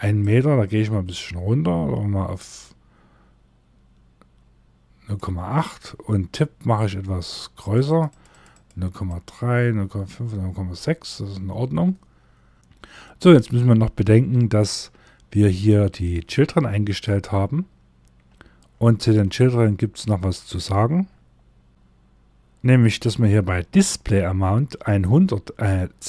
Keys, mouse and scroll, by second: 7.0 click, 15.0 click, 15.6 scroll up 2, 17.7 scroll down 1, 20.2 scroll up 1, 21.7 scroll up 1.